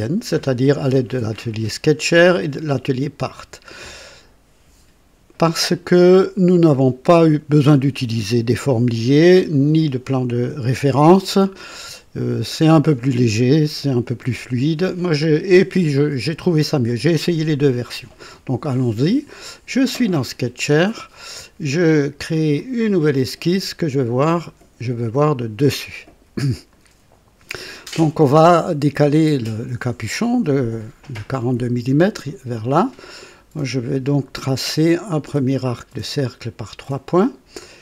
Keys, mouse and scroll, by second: 2.1 click, 4.0 click, 22.6 click, 25.4 click, 26.7 right click, 36.8 click.